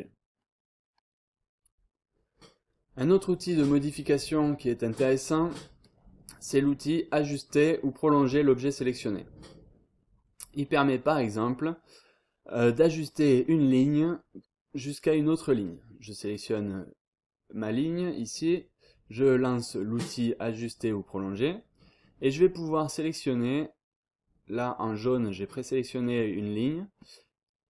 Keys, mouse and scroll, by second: 10.1-10.5 scroll up 1, 10.5-10.9 scroll down 1, 10.9-11.5 scroll up 1, 13.0 click, 13.4-13.9 scroll down 2, 13.9-14.6 scroll up 2, 19.6 click, 27.2-27.6 scroll up 1.